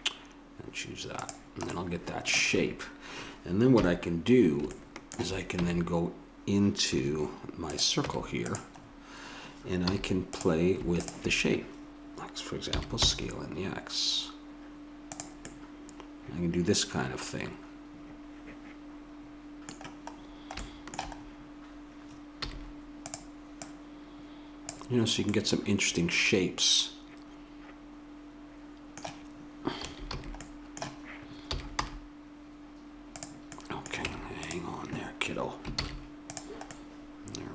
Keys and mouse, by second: 1.9 middle click, 3.7 KP_1, 5.6 Tab, 7.7-8.8 right drag, 8.0 Tab, 8.8 middle click, 9.9 a, 12.7 s, 15.5-16.5 middle drag, 19.0 middle click, 20.1-23.1 middle drag, 22.4 a, 23.1-24.9 drag, 24.9 middle click, 25.0 click, 25.5 middle click, 25.7 middle click, 29.8 a, 30.1 a, 30.4-32.4 drag, 31.4 s, 34.0 Tab, 35.7 shift+s.